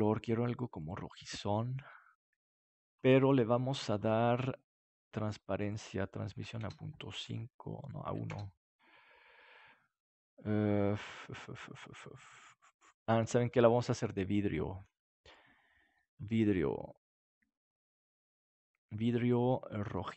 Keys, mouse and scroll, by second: 3.7-5.6 middle drag, 5.6 click, 8.9 click, 14.8-17.2 drag, 19.2-20.1 drag.